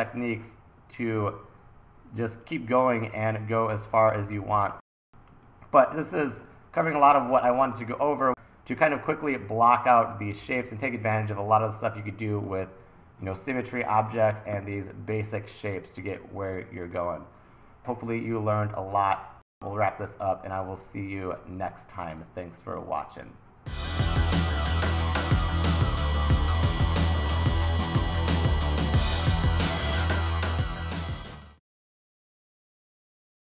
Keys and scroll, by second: 3.1 super+z, 5.1 e, 7.1 super+s, 9.4 1, 17.8 super+s.